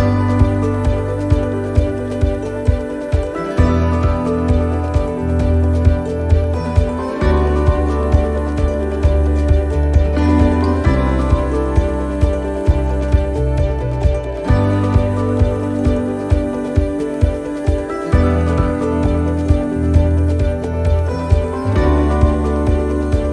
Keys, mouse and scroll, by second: 1.3 click, 1.3 middle click, 1.7 scroll down 2, 2.1 shift+middle click, 2.5-3.4 scroll up 3, 2.8 middle click, 4.5 shift+middle click, 4.5 right click, 5.5 c, 8.3 middle click, 8.3-8.6 scroll down 2, 8.6 middle click, 10.1 e, 14.2 middle click, 14.2 click, 15.5 middle click, 16.9 click, 18.6 middle click.